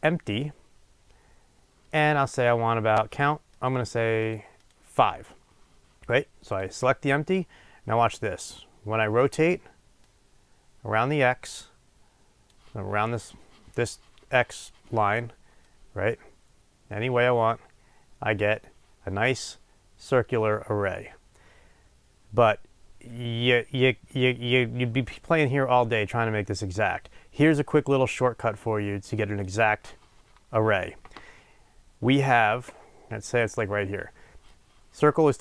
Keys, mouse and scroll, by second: 0.0-6.7 drag, 10.2-35.4 drag.